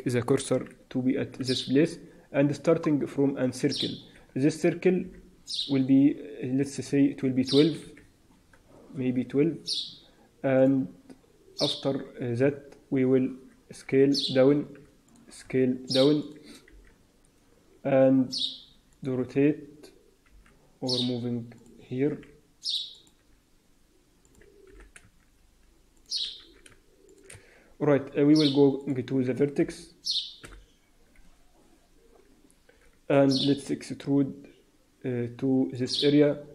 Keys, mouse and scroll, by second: 1.7 shift+a, 4.9 F6, 6.5 click, 7.4 click, 10.5 click, 13.7 s, 14.7 s, 15.3 s, 16.6 r, 20.2 g, 22.0 r, 23.1 s, 24.6 g, 26.3 s, 27.3 Tab, 28.7 click, 29.5 t, 30.3 n, 36.3-36.5 scroll up 3, 36.3 e.